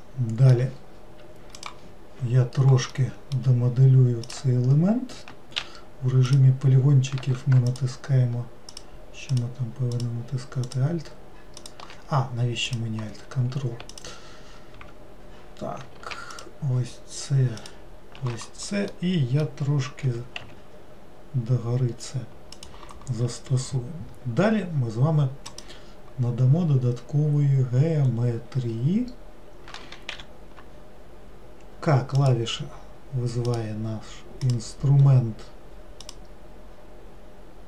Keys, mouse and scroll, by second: 3.0-4.3 middle drag, 4.3 click, 6.4 click, 7.8 alt+click, 8.8 alt+click, 9.4 alt+click, 10.0 alt+click, 10.7 alt+click, 11.7 alt+click, 12.8 click, 14.0 ctrl+click, 16.4 ctrl+shift+click, 17.7 ctrl+shift+click, 19.0-20.1 middle drag, 20.1 g, 25.5 click, 28.1-30.2 scroll up 3, 30.2 k.